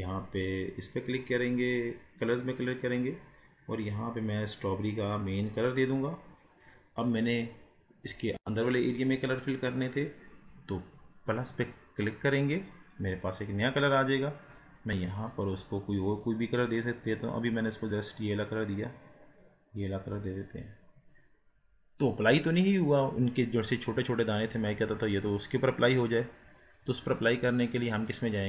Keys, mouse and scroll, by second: 6.5-12.0 middle drag, 12.0-15.2 drag, 22.6-25.1 middle drag, 25.1-25.8 scroll up 6, 26.6 scroll down 4, 27.9-28.4 drag.